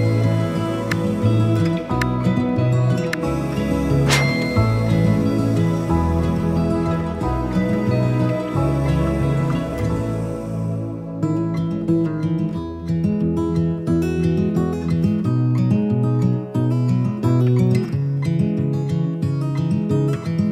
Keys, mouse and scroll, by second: 2.9 click, 9.8 click, 13.1 click, 16.2 click, 17.3 click, 19.9-20.5 drag.